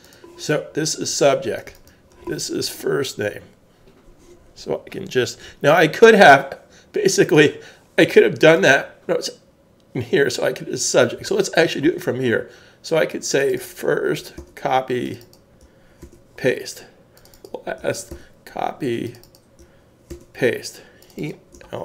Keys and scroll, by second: 14.4 super+c, 16.0 super+v, 18.1 super+c, 20.1 super+v.